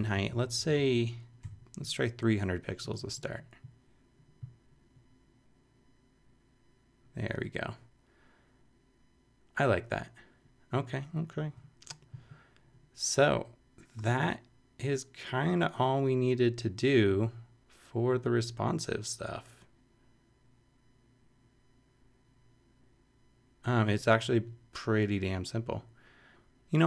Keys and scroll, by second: 0.7 shift+Left, 0.8 shift+Right, 1.4 shift+3.